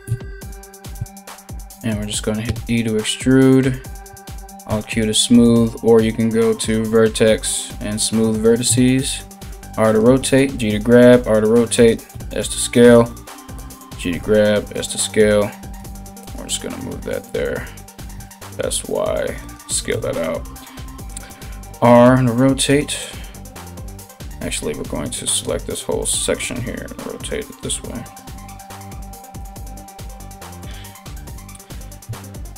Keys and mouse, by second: 0.5 KP_1, 2.0 e, 4.0 alt+q, 6.1-9.6 drag, 8.6 r, 9.8 g, 10.5 r, 11.7 s, 12.7 g, 13.8 s, 15.4 g, 17.7 s, 19.5 KP_3, 20.9 r, 26.0 r, 28.4 g, 29.7 g.